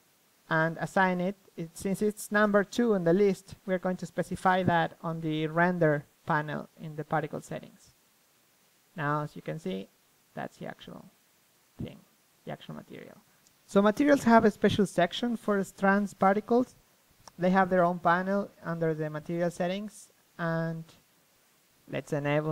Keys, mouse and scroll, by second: 3.8-5.5 middle drag, 5.5-9.4 drag, 7.7 middle click, 9.4 middle click, 9.7-11.4 drag, 13.2-18.0 drag, 18.0 middle click, 19.4-21.9 middle drag.